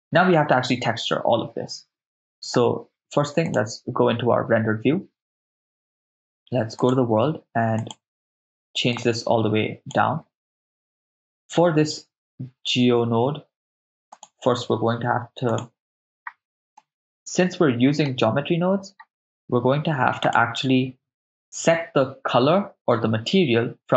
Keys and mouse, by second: 4.9 click, 6.8 click, 7.8 click, 14.2-15.7 drag, 16.8-18.1 middle drag, 20.2 click.